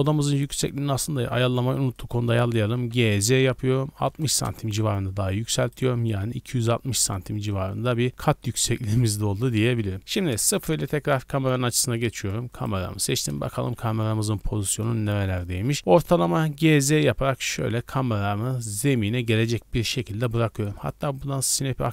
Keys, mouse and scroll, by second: 0.4 Tab, 0.7 middle drag, 1.9 right click, 2.4 scroll down 2, 2.7 g, 3.0 z, 3.9 KP_6, 4.0 KP_0, 4.4 KP_Enter, 5.6 right click, 6.9 middle drag, 7.1-8.3 scroll up 4, 8.4-9.4 shift+middle drag, 9.4-9.9 scroll down 4, 10.0 middle click, 10.4 KP_0, 12.1 Tab, 12.5 right click, 12.9-13.5 scroll down 1, 13.5 KP_1, 14.1 z, 14.7-15.8 scroll up 5, 15.1 shift+middle click, 15.8 scroll down 1, 16.3 g, 16.6 z, 19.7 click.